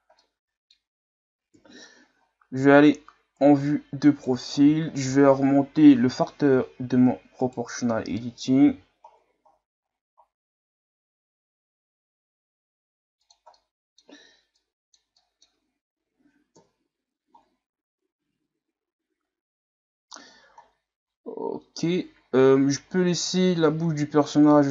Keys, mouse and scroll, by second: 0.2-1.5 middle drag, 1.5 KP_3, 2.2-2.6 scroll up 4, 2.6 Tab, 3.4 right click, 4.5 ctrl+z, 6.8 s, 8.6 g, 13.6 middle click, 14.5 click, 15.2 middle click, 15.5 Tab, 16.5 KP_1, 17.4-18.9 scroll down 4, 18.9-20.6 scroll up 4, 20.6-21.4 scroll down 2, 21.4-22.2 scroll up 5, 22.2-22.8 scroll down 1, 22.8-23.2 scroll up 6, 23.6-24.3 scroll down 3, 24.3-24.6 scroll down 4, 24.6-24.7 scroll up 8.